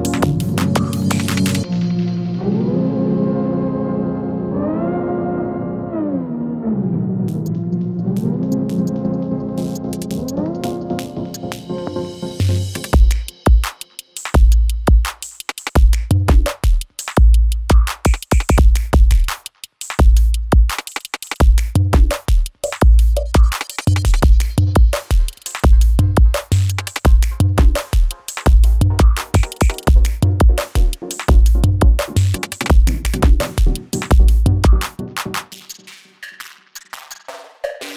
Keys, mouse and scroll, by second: 12.0 click, 12.7 u, 13.7-15.5 scroll down 1, 25.3-25.6 alt+scroll up 1, 26.5 click, 28.4 shift+click, 34.2 Return, 35.5 click, 37.1 Right.